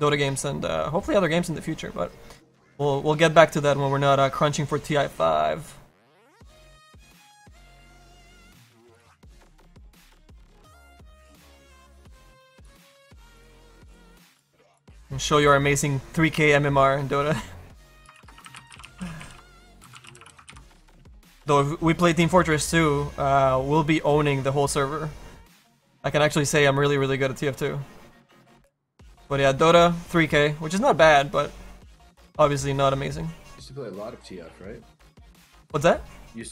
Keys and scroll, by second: 4.1 s.